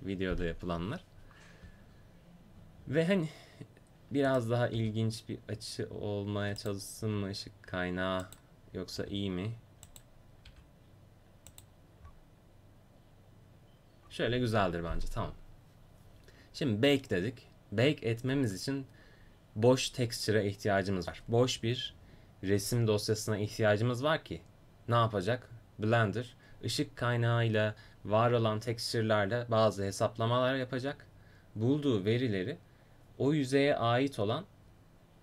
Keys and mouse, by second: 4.7 r, 7.0 s, 9.0 g, 10.5 r.